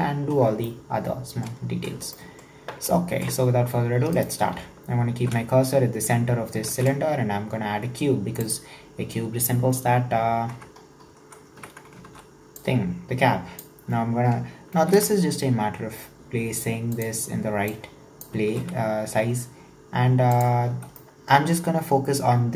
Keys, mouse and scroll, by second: 0.1-0.7 scroll up 1, 0.7-1.6 shift+middle drag, 1.6-2.0 scroll up 1, 2.2-4.2 shift+middle drag, 4.2 right click, 4.5 shift+s, 6.7 shift+a, 9.8-10.5 scroll down 4, 10.5 Tab, 10.9-11.6 scroll up 2, 11.6 1, 12.1 alt+z, 12.6 click, 15.0 g, 17.7 click, 18.5 g, 20.6-21.0 scroll up 3, 21.0-22.5 shift+middle drag.